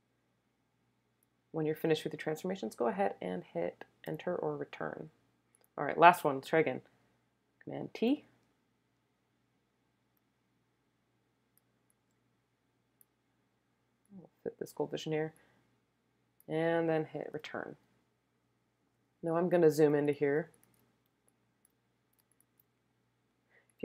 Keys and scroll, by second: 4.0 Return, 7.8 super+t, 17.3 Return, 20.0 super+space, 20.6 space, 21.1 space, 22.5 space, 23.3 space.